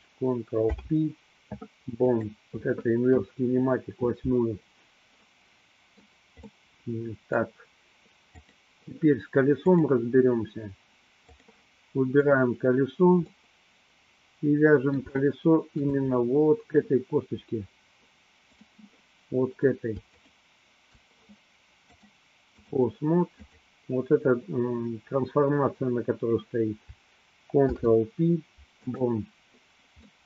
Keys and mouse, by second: 0.6 ctrl+p, 5.3-6.3 middle drag, 6.6-7.6 middle drag, 8.5-8.9 drag, 9.9-11.6 drag, 12.3 click, 13.5-16.0 middle drag, 18.5 click, 20.1 shift+click, 22.0-22.8 drag, 23.5-24.0 drag, 27.6 ctrl+p.